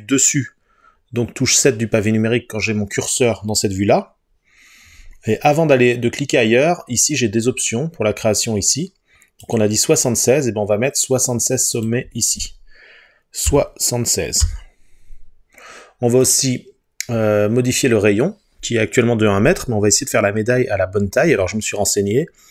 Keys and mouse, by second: 9.5 click, 11.8-16.3 drag.